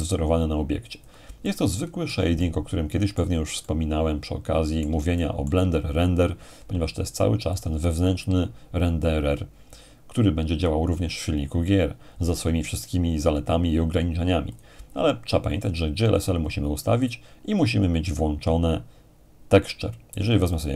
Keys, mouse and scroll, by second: 0.9-6.4 drag, 1.4-6.4 middle drag, 7.5-8.6 drag, 14.5-15.5 drag, 18.0-19.1 drag, 20.5-20.7 drag.